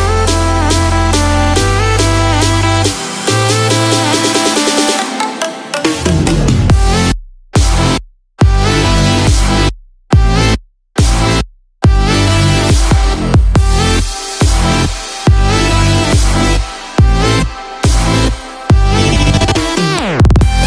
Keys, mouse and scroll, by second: 0.0 Tab, 0.3-1.3 scroll down 1, 1.3 click, 3.5 click, 3.8 click, 4.6 click, 6.7 Tab, 6.7 click, 7.2 Tab, 7.8 click, 8.1 Tab, 8.6 Tab, 8.8 click, 9.3 Tab, 9.8 Tab, 10.2 click, 10.7 Tab, 11.1 Tab, 11.4 click, 11.8 Tab, 12.2 Tab, 12.5 click, 12.8 Tab, 13.3 Tab, 13.8 click, 14.2 Tab, 15.3 Tab, 15.6-16.0 scroll down 4, 16.1 middle click, 16.6-17.3 scroll down 2.